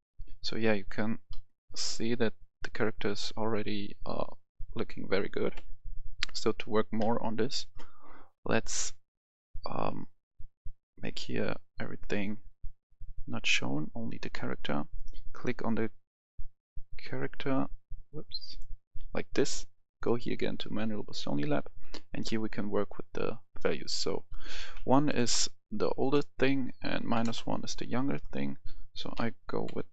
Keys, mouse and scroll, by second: 1.2 scroll up 1, 1.3 scroll down 1, 1.7 scroll up 1, 1.8-5.5 scroll down 1, 5.5 Escape, 7.0 KP_1, 7.8-9.8 scroll up 1, 10.8 click, 12.4-13.0 scroll down 1, 13.0 click, 13.4-14.2 scroll down 1, 14.5-14.9 scroll up 1, 19.3 right click, 20.0-21.1 drag, 24.7 click, 25.1 Return, 26.0-27.1 drag, 27.1 1, 27.2 Return, 28.1 click.